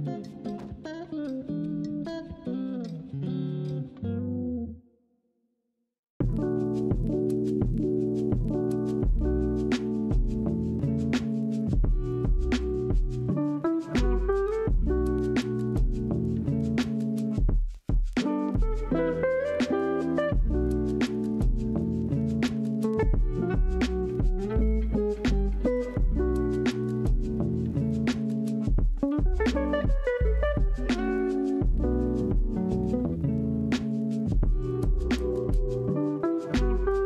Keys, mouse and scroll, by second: 1.3 click, 1.7 scroll down 1, 1.8 middle click, 2.3 click, 2.6 scroll down 1, 2.8-4.5 middle drag, 4.5-5.1 scroll up 2, 5.1-7.9 middle drag, 7.9-11.1 drag, 15.6-16.1 shift+middle drag, 16.1-16.7 scroll up 2, 16.7-18.0 middle drag, 18.0-19.4 drag, 20.0-20.3 scroll down 1, 20.3-21.9 middle drag, 21.9 scroll down 1, 22.1-24.3 middle drag, 24.3 click, 29.3 middle click, 29.6-29.9 scroll up 2, 29.9-30.5 middle drag, 30.5 Tab, 31.1 ctrl+r, 34.0 Tab, 35.0 shift+click.